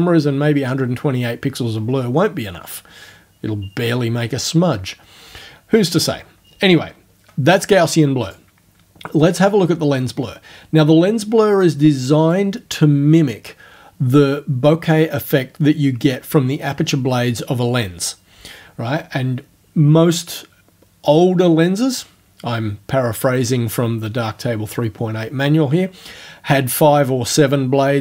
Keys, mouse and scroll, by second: 8.3 click, 9.4 click, 11.7 click.